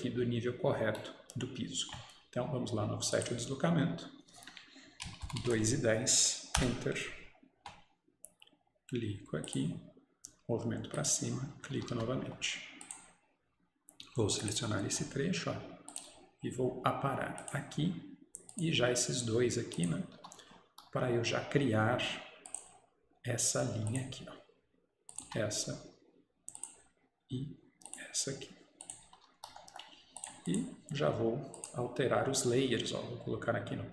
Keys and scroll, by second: 6.6 Return, 6.6 typing, 11.6 Return, 11.8 Escape, 12.0 Escape, 20.3 Escape, 25.3 Escape.